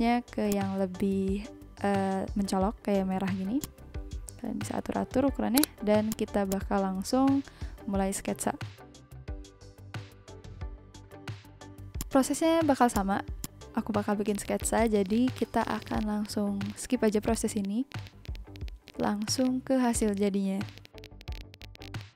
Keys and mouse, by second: 0.4 click, 3.6 click, 4.4 z, 5.7 click, 7.0 ctrl+z, 9.6 click, 11.6 click, 14.6 click, 14.7 click, 14.9 ctrl+z, 15.0 click, 15.4 click, 15.6 click, 16.0 ctrl+z, 16.2 click, 16.5 click, 17.0 click, 17.2 click, 17.5 click, 17.7 click, 17.8 click, 17.9 ctrl+z, 18.1 click, 18.2 ctrl+z, 18.4 click, 18.6 click, 18.6 ctrl+z, 18.7 click, 18.8 click, 19.0 click, 19.0 ctrl+z, 19.2 click, 19.7 click, 19.9 click, 20.6 click, 21.3 click, 21.6 click, 21.8 click.